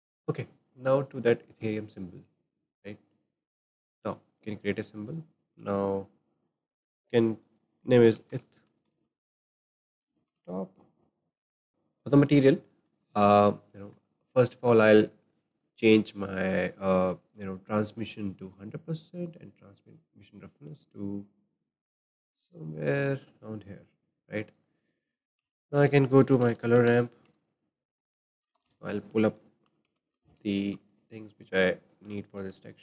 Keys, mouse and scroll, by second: 1.2 click, 4.1-10.4 drag, 11.2-11.5 drag, 11.6-15.1 shift+middle drag, 15.1-15.6 scroll down 2, 15.6-18.2 shift+middle drag, 18.2-22.9 drag, 24.3-27.3 shift+middle drag, 24.6-25.0 scroll down 2, 25.4 shift+a, 27.3 shift+a, 28.5 shift+a, 32.1 shift+a.